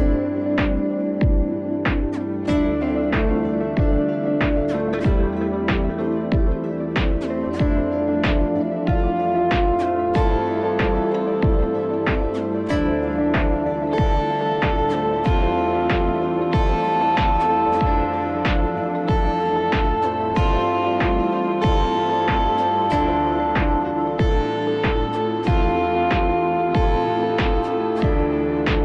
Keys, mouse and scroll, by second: 0.1 click, 0.3 click, 2.6 click, 3.4 click, 4.5 click, 9.5 click, 10.3 click, 12.4 click, 17.1 click, 18.3 click, 21.6 click, 22.9 click, 24.0 click, 25.7 click.